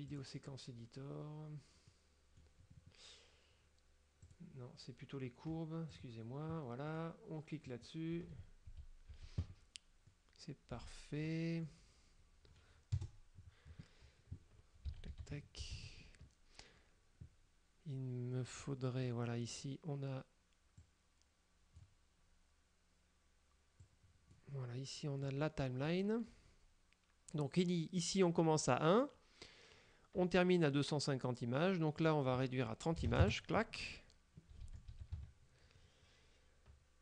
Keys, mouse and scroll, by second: 0.2 click, 2.0 middle click, 4.3 click, 6.0 click, 7.0 middle click, 7.8 click, 8.8 a, 10.2 middle click, 11.3 middle click, 13.0 KP_0, 14.9 a, 15.4 KP_Decimal, 15.7 a, 15.8 KP_Decimal, 18.7 click, 20.9-22.1 drag, 23.9 click, 25.4 click, 32.1 click, 33.1 KP_3, 33.2 KP_0, 33.3 KP_Enter, 34.7 a, 35.2 KP_Decimal.